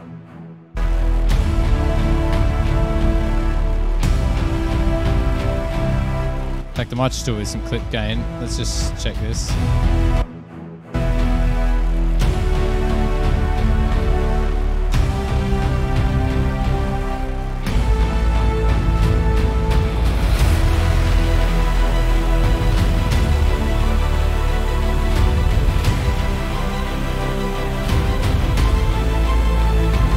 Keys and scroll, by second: 0.0 s, 1.0 s, 5.2 F8, 10.4-11.6 typing, 16.0 F7.